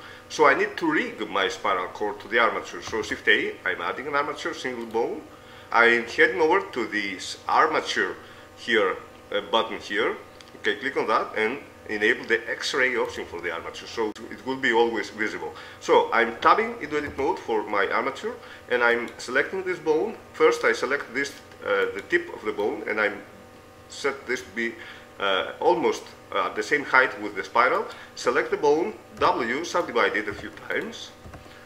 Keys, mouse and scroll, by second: 3.3 shift+a, 13.5 click, 14.0-15.6 middle drag, 15.6-17.0 drag, 17.0 middle click, 17.6 Tab, 19.2-21.0 right drag, 22.2-23.6 right drag, 23.0-24.8 drag, 28.0-29.8 right drag, 29.4 w, 30.6 w, 31.4 w.